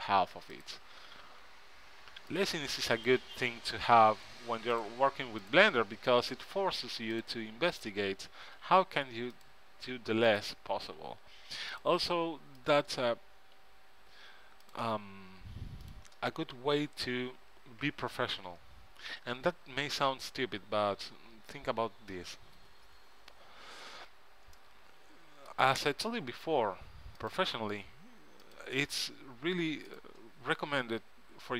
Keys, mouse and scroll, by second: 1.6 f, 4.1 f, 6.5 f, 8.7-17.0 drag, 8.7 f, 11.1 f, 13.7 f, 17.0 f, 17.6 click, 25.2-27.3 middle drag, 27.3-31.5 drag, 30.9 f.